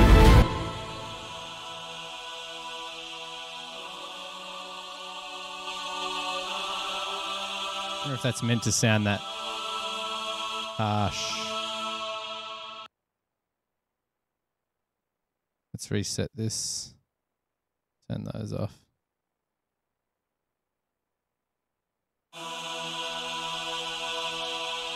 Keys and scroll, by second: 2.3 super+=, 7.5 super+=, 13.0 space, 13.2 space, 19.8 super+=, 21.1 space, 21.5 space, 22.8 super+e.